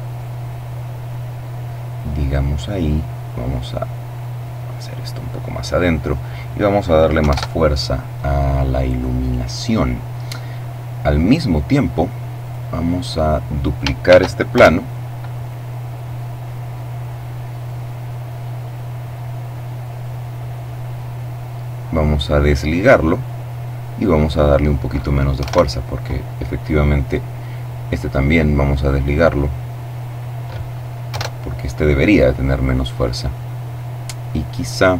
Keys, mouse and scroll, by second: 2.4-4.4 drag, 5.3 click, 6.4 2, 6.5 KP_Enter, 9.8-11.6 middle drag, 11.6 right click, 11.7-14.7 middle drag, 13.3 shift+d, 13.7 shift+Return, 14.7-16.8 drag, 16.9-19.7 drag, 21.5 click, 23.3 click, 24.5 1, 24.6 Return, 27.1 right click, 28.2 click, 29.1 click, 30.3 Return, 32.9-33.4 scroll down 2, 33.5-34.9 middle drag.